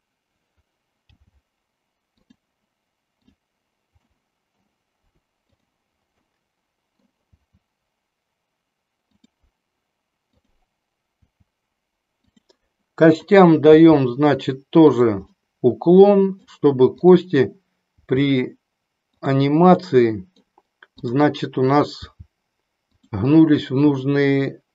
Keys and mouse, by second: 1.0 g, 3.2 click, 4.1 middle click, 5.5 click, 6.2 middle click, 7.3 g, 9.2 click, 10.2 click, 11.2 g, 12.3 click, 13.1 click, 13.8 g, 15.3-16.5 middle drag, 18.0 g, 19.8 middle click, 21.1 click, 22.0 g.